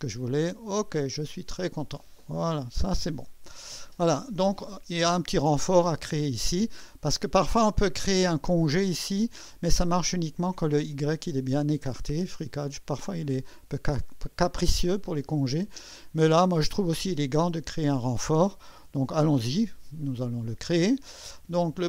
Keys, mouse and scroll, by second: 0.9 click, 2.5 1, 12.3-13.3 scroll up 1, 13.3-16.9 drag, 18.7 1.